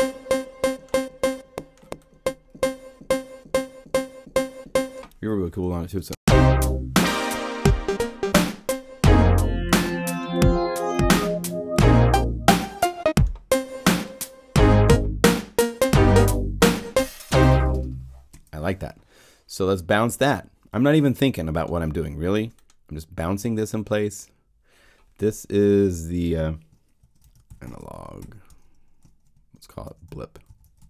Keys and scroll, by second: 5.8 0, 6.0 Home, 18.2 0, 26.7-30.8 typing.